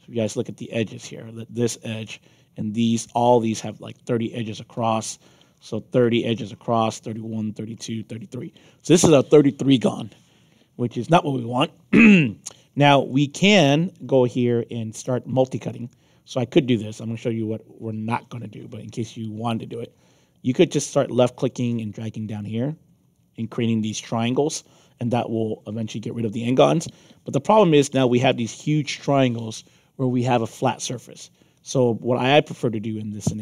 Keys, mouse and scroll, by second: 0.9 click, 2.7 click, 4.9 alt+click, 5.5 scroll up 2, 7.6 middle click, 11.7 middle click, 12.2 middle click, 12.5 scroll down 2, 13.0 alt+click, 13.3 alt+middle click, 15.7 click, 18.8 middle click, 20.4 click, 23.4 click, 31.1 ctrl+z, 31.9 middle click, 32.5-33.4 alt+drag.